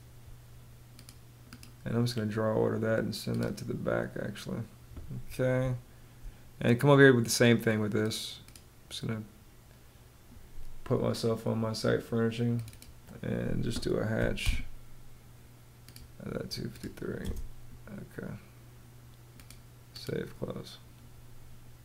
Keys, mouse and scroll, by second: 5.1 space, 13.6 h, 14.0 space, 16.7 space.